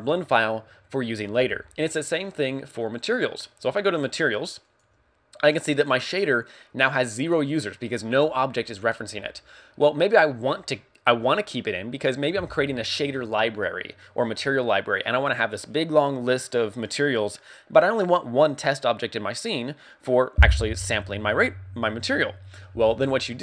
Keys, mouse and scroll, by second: 3.6 click, 4.6 click.